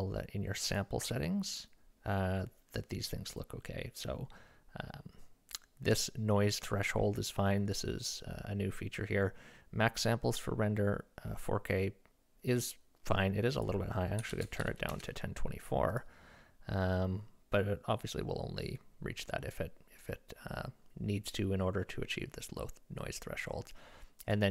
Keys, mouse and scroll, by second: 0.7 click, 1.5 click, 13.7-15.4 drag, 15.9 click, 24.2 click.